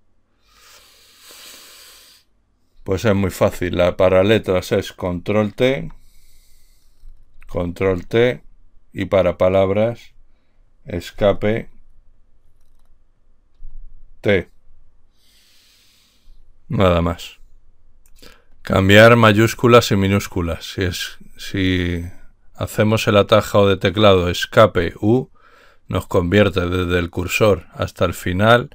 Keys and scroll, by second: 3.9 Left, 6.1 Left, 7.7 ctrl+t, 11.6 Escape, 13.8 t.